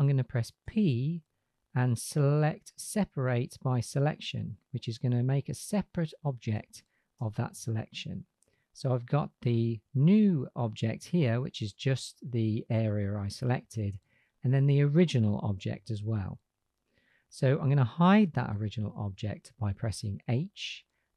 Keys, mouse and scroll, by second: 0.6 p, 7.3 Tab, 14.3 click, 15.6 g, 18.5 h.